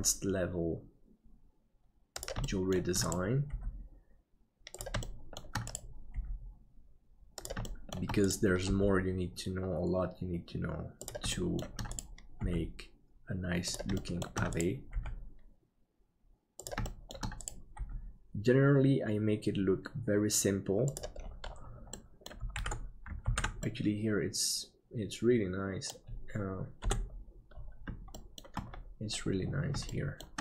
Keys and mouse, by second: 2.6 middle click, 3.5 g, 5.2 shift+middle click, 6.2 g, 7.7 shift+middle click, 11.4 shift+middle click, 12.4 g, 14.1 shift+middle click, 14.6 right click, 14.9 g, 16.9 shift+middle click, 22.1 middle click, 22.6 alt+a, 23.7 ctrl+s, 23.7-26.5 middle drag, 26.9 KP_7, 28.2 middle click, 29.9 shift+middle click.